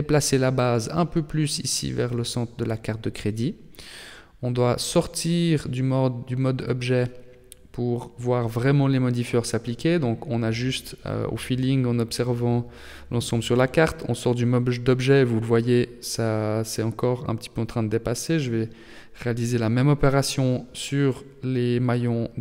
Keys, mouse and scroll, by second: 0.7 g, 3.7 shift+middle click, 5.3 g, 9.0 scroll down 2, 9.9 middle click, 12.3 shift+middle click, 12.9 Tab, 13.3 right click, 13.9 Tab, 15.1 g, 18.4 scroll down 2, 19.0 Tab, 20.1-21.7 scroll down 3, 20.5 middle click, 22.3 middle click.